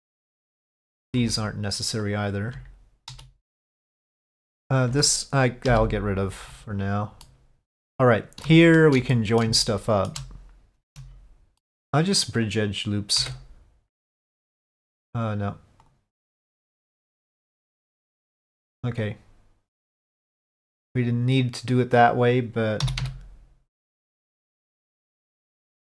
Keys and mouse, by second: 0.0-1.0 middle drag, 1.4 alt+click, 2.1 alt+click, 4.5 alt+click, 5.8 Delete, 7.3 middle click, 8.6 shift+middle click, 9.2 middle click, 9.8 shift+middle click, 11.3 alt+click, 11.7 middle click, 13.9 F3, 16.5-17.9 drag, 20.8-22.1 drag.